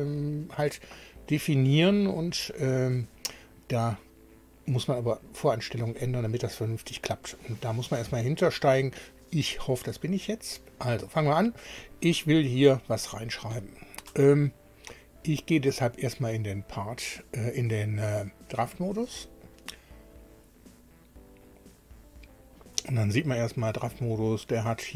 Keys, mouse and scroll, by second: 11.8 click, 15.3 click, 18.8 click, 23.5 scroll down 2.